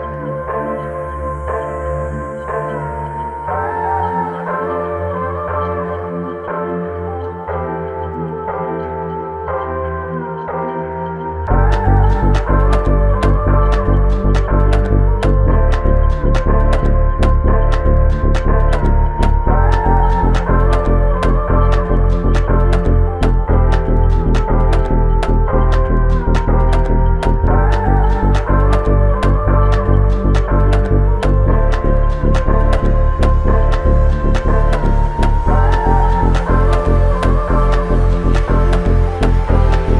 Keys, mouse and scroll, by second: 4.2 typing, 4.2 alt+click, 7.9 double click, 9.2 alt+click, 11.6 double click, 12.5 alt+click, 14.5 alt+click, 15.5 double click, 17.2 ctrl+alt+click, 18.5 shift+click, 20.4 typing, 23.7 double click, 30.0 shift+click, 31.3 shift+click, 34.8 ctrl+alt+click, 36.4 ctrl+alt+click, 38.0 alt+shift+click.